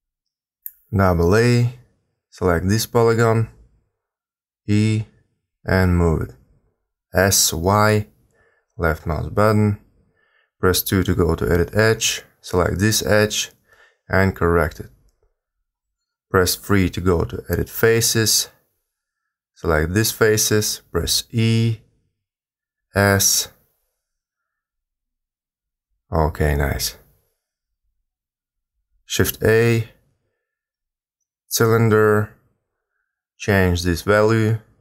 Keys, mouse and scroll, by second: 0.3 a, 0.4 a, 1.0 b, 2.7 e, 4.1 g, 5.9 s, 9.4 2, 10.0 a, 10.1 a, 10.7 b, 12.1 g, 15.8 3, 16.8 a, 16.9 a, 17.3 b, 19.6 b, 21.5 e, 22.8 s, 23.9 g, 28.9 shift+a, 33.1 click, 34.4 click.